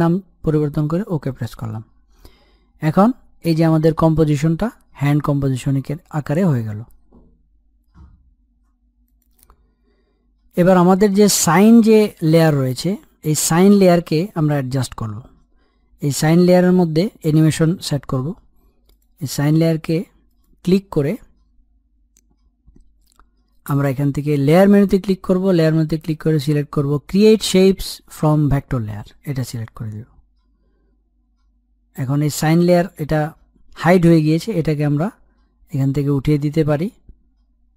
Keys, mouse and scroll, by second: 1.5-4.5 drag, 5.8-6.9 scroll up 1, 6.9-7.3 scroll down 1, 12.0-12.4 scroll up 1, 12.4 middle click, 13.1-14.9 scroll up 1, 18.9 click, 24.3 click, 28.4 click, 32.3 click, 36.6 click.